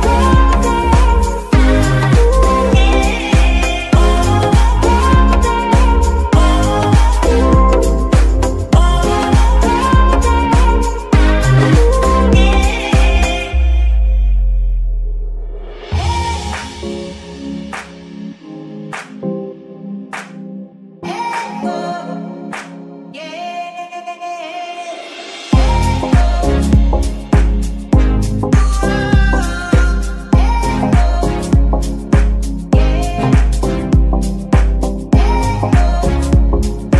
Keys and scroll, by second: 1.7 alt+g, 7.3 r, 8.2 Escape, 9.2 shift+g, 10.0 Escape, 15.0 r, 16.0 g, 16.7 Escape, 17.5 g, 18.2 Escape, 19.0 g, 20.0 Escape, 20.9 g, 22.4 Escape, 29.3 r, 30.2 Escape, 30.5 g, 31.0 Escape, 31.6 g, 33.0 Escape, 33.6 g, 34.2 Escape, 35.3 g, 36.4 Escape.